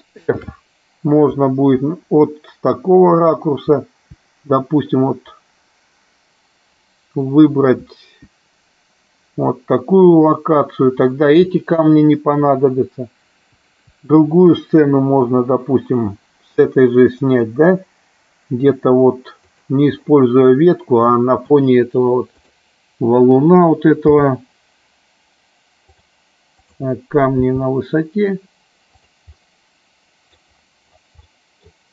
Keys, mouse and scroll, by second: 0.6 shift+f, 1.4 Left, 3.8 Left, 8.0 Up, 12.6 Right, 16.8 Up, 17.4 Up, 19.6 click, 22.4 click, 26.1 click, 26.8 click, 29.6 middle click, 31.5 middle click.